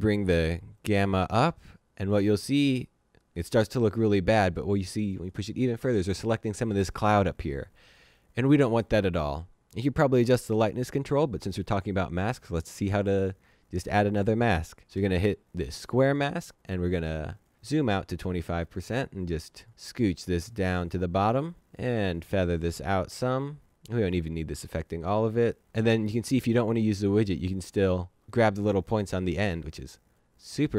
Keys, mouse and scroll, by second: 0.7 click, 15.8 click, 16.5 scroll down 1, 17.2 click, 18.9 ctrl+shift+z, 19.4 z, 19.5 click, 26.8 click.